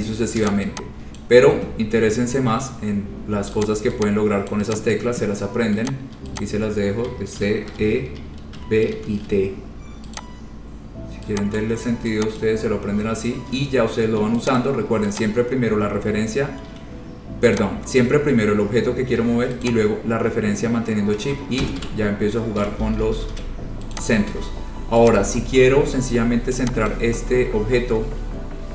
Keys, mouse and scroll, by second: 0.0-0.4 scroll, 0.6 click, 1.4 click, 1.8-2.2 scroll, 2.7-3.2 scroll, 3.8 click, 4.7 click, 5.0 click, 6.0 click, 6.6 click, 7.5-9.1 typing, 10.4 click, 11.8 click, 12.6 click, 14.7 click, 15.3 click, 17.7 click, 19.8 shift+click, 19.9 shift+click, 21.6-22.5 typing, 23.2 ctrl+z, 23.4 ctrl+z, 24.1 click, 24.4 scroll down 3, 24.7 scroll, 24.7 space, 25.3 click, 26.1-26.8 scroll, 27.1 click, 27.6 scroll.